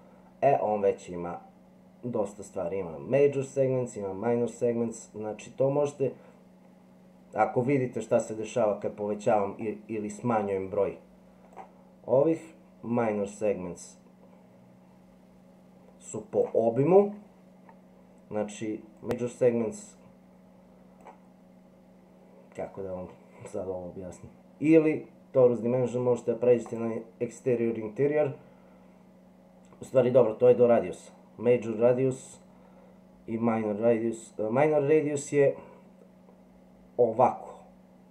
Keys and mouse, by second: 4.8-11.5 drag, 12.3-16.4 drag, 18.9-21.0 drag, 26.7 click, 29.9 click.